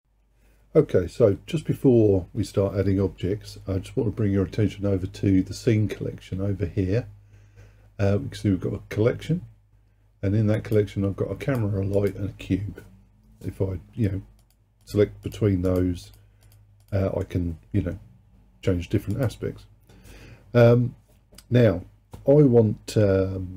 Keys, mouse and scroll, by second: 10.6 click, 11.5 click, 12.0 click, 14.4 click, 14.9 click, 15.3 click, 15.7 click, 16.1 click, 16.5 click, 16.9 click, 19.2 click.